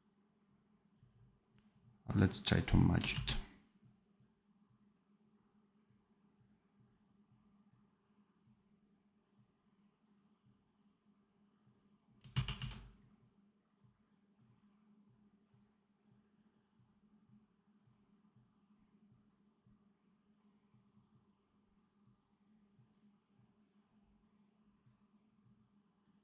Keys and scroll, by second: 3.0 ctrl+z, 12.2 ctrl+z.